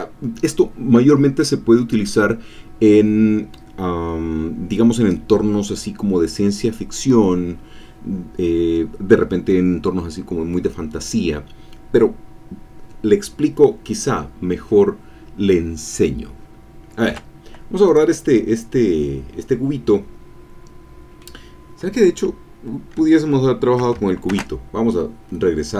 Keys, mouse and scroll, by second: 17.9 click, 18.7-21.4 middle drag, 24.3 ctrl+z, 25.1-25.5 scroll up 2, 25.5-25.7 scroll down 2.